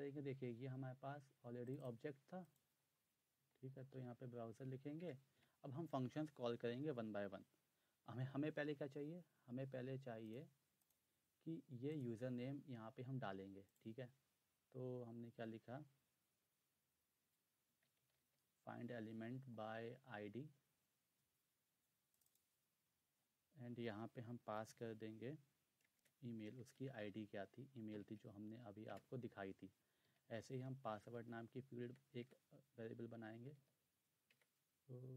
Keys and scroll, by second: 3.1-3.9 typing, 5.0 Return, 5.4 ., 15.7-18.6 typing, 25.7-27.5 typing, 27.9 Right, 28.1 Right, 28.8 Return, 29.9-34.3 typing.